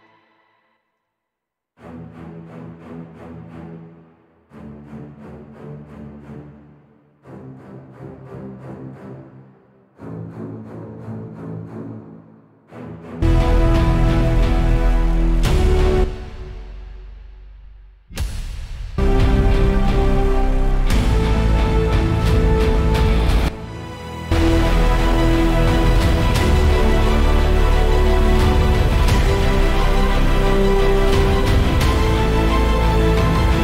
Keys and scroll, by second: 0.9 space, 1.1 space.